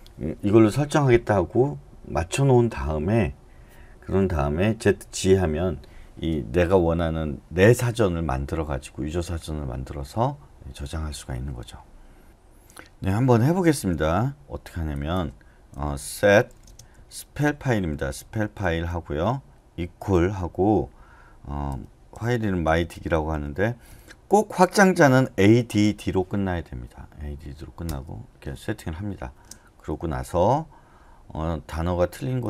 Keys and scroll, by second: 15.9-20.0 typing, 21.4-23.9 typing, 25.0-25.7 typing, 27.8 Return.